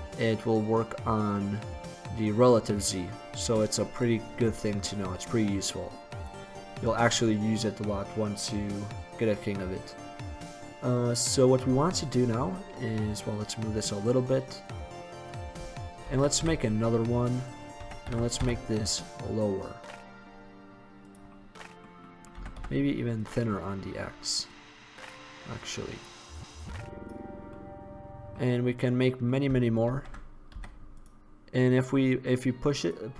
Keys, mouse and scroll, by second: 6.6-9.8 middle drag, 11.4-13.2 middle drag, 13.2 click, 16.2 shift+d, 17.4-17.9 drag, 17.9 s, 21.5-22.2 drag, 22.5 s, 27.7-28.3 drag, 28.3-29.4 middle drag, 29.9 shift+d, 31.0-31.7 drag.